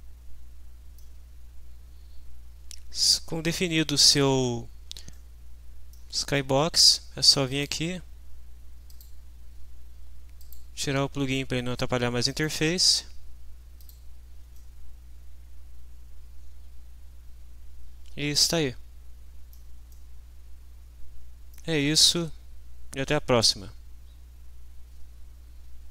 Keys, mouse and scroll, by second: 3.1-4.2 drag, 5.1 click, 6.0 middle click, 7.5 click, 8.9 click, 10.4 click, 12.3 click, 13.8 click, 14.6 middle click, 14.8-19.7 drag, 19.9-21.7 drag.